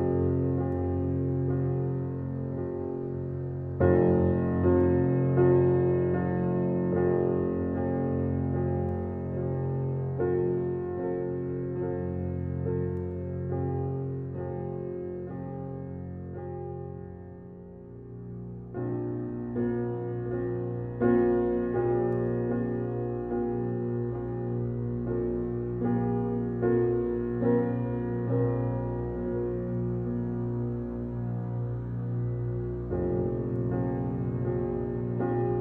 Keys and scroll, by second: 6.2 f, 14.9 f.